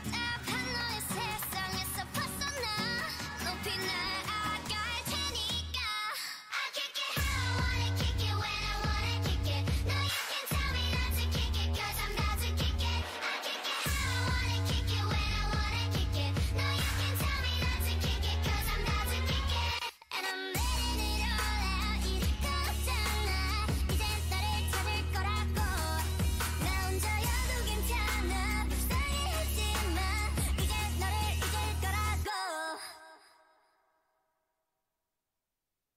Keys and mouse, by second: 1.2 l, 3.0-5.3 drag, 5.3 g, 6.8 a, 7.1 l, 7.3 g, 12.6 a, 12.7 a, 12.9 g, 14.5 g, 15.1 s, 15.9 g, 16.6 s, 20.5 middle click, 20.7 Tab, 22.0-23.3 drag, 22.5 Tab, 22.8 a, 23.0 a, 23.7 click, 24.5 Tab, 24.8 click, 25.1 Tab, 25.4-28.3 drag, 25.4 a, 28.3 t, 28.9 click, 29.7 t, 32.0 Tab, 35.5 click.